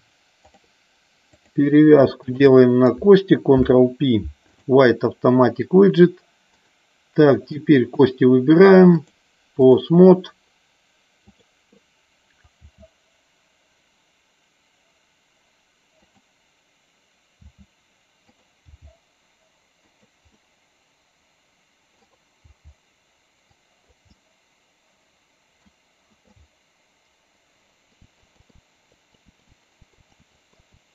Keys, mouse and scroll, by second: 2.4 shift+click, 3.7 ctrl+p, 6.7 click, 7.7 click, 9.0 click, 11.3 click, 12.8 r, 16.1 click, 17.5 r, 18.4 click, 18.8 g, 19.9 click, 20.5-22.1 middle drag, 22.5 g, 23.5 click, 24.3-25.8 middle drag, 26.4-28.0 middle drag, 28.0-30.7 typing, 28.2 middle click, 29.1 click, 29.8 middle click, 30.3 middle click, 30.7 scroll down 1.